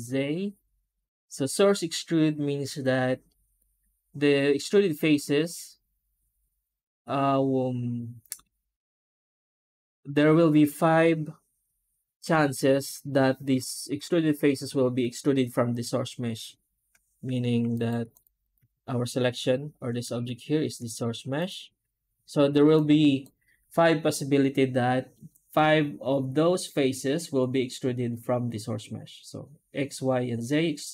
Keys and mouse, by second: 17.2 Tab, 17.6 right click, 18.3 right click, 18.4 Tab.